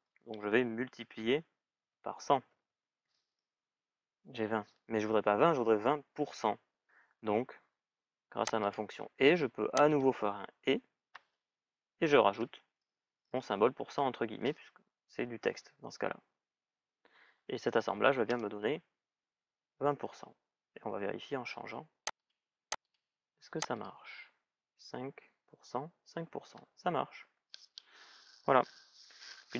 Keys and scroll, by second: 2.8 Return, 13.0 shift+ù, 18.0 Return.